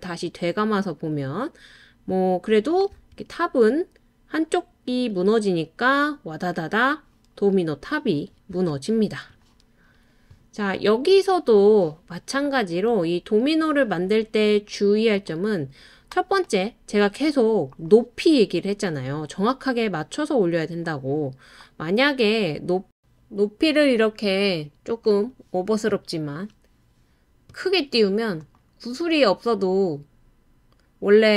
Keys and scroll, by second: 2.9 space, 8.5 space, 23.0 BackSpace.